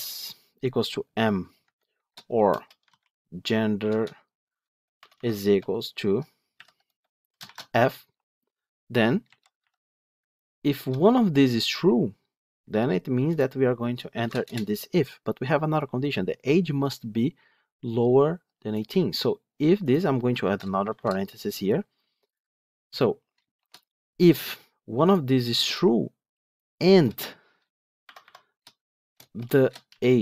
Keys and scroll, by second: 9.5 Delete, 13.6 Delete.